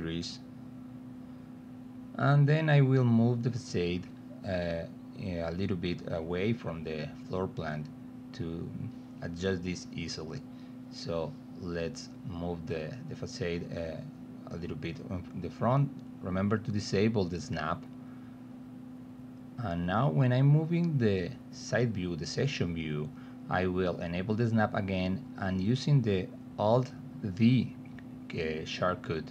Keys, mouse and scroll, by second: 0.9-4.4 drag, 4.8-6.2 alt+middle drag, 6.5 t, 7.9 w, 8.3 alt+middle click, 9.8 alt+middle click, 10.5 middle click, 14.3 drag, 15.3 click, 16.6-18.1 drag, 18.4 click, 19.3-19.6 drag, 20.1 middle click, 21.0 alt+middle click, 22.3 middle click, 23.4 click, 24.7 middle click, 27.3-29.3 drag.